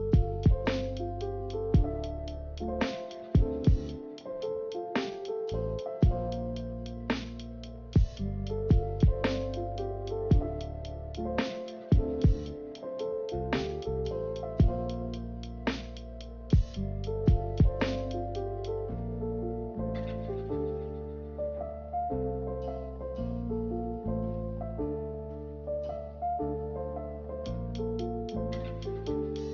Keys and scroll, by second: 0.0 ctrl+z, 1.3 b, 5.2 Delete, 9.5 a, 16.3 ctrl+z, 16.6 ctrl+z, 22.1 g, 24.2 z, 29.4 Delete.